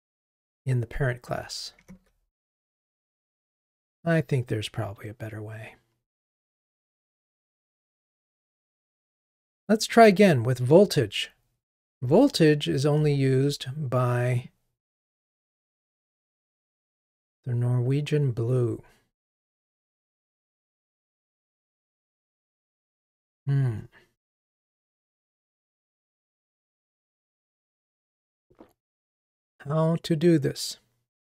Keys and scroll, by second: 2.7 ctrl+r, 12.9 super+b.